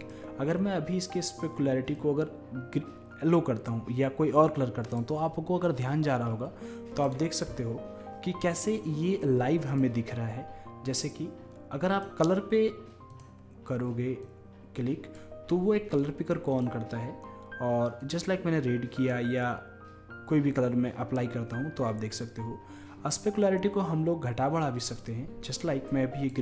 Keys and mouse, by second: 0.1-6.3 drag, 7.0-8.9 drag, 9.7-11.7 drag, 13.2-18.5 drag.